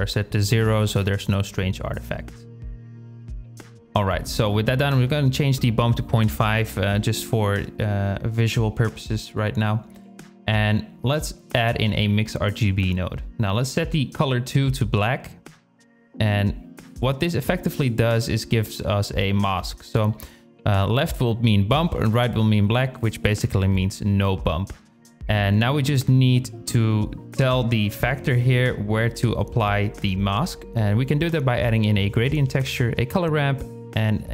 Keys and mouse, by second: 2.5 shift+click, 4.2-5.6 drag, 9.8 shift+a, 13.2 click, 17.1 click, 20.8 click, 24.2 click, 25.2-26.9 drag, 27.9-29.0 drag, 29.0 shift+a, 32.8 click, 33.0 shift+a, 33.9 p.